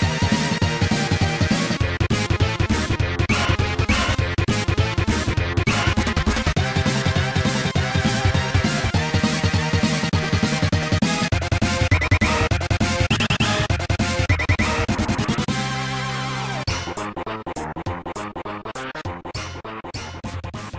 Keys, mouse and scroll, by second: 0.2 middle click, 1.8 click, 2.2 click, 2.5 click, 2.9-3.6 scroll down 2, 3.9 right click, 4.0 right click, 4.3 g, 5.4 click, 5.9 shift+f, 6.7 click, 7.4 ctrl+z, 8.1-8.7 scroll down 2, 9.3-13.6 typing, 14.2 click, 14.7 shift+d, 15.5 click, 15.9 shift+d, 16.7 click, 16.9 ctrl+s, 17.1 click, 17.2 click, 18.3-19.2 typing, 20.2 right click.